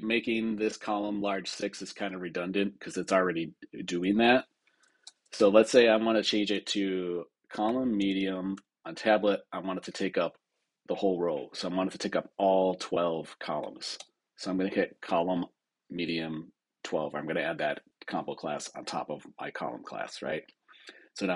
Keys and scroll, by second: 4.9 super+Return, 13.9 Return.